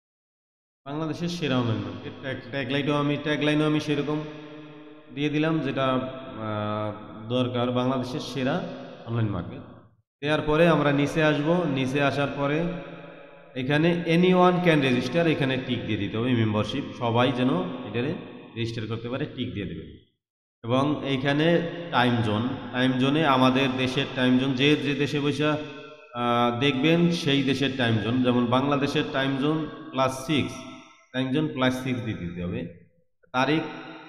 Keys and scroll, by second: 0.0 t.